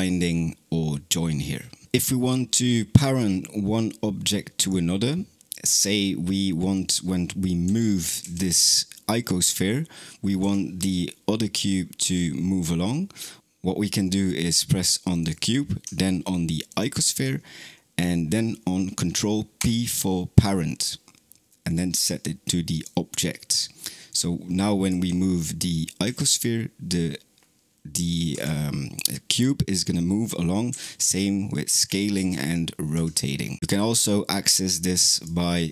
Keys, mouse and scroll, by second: 4.4 click, 6.6 click, 7.5 g, 13.4 click, 15.0 click, 16.5 shift+click, 19.4 ctrl+p, 23.9 click, 24.7 g, 32.0 r, 33.6 ctrl+z, 35.0-35.7 right drag.